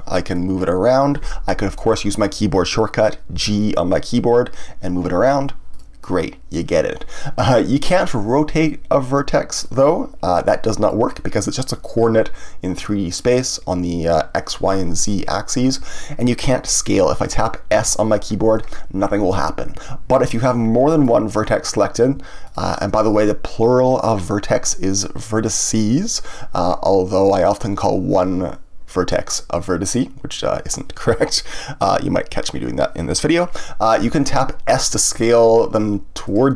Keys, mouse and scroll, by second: 3.3 g, 5.7 click, 9.6-12.7 drag, 19.8 Escape, 20.4-22.4 middle drag, 22.4 shift+click, 36.3 click.